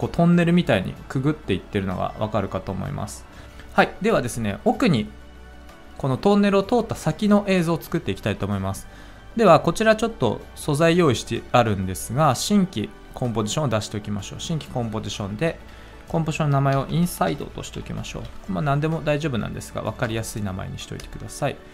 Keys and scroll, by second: 16.5-18.6 typing, 20.0 Return.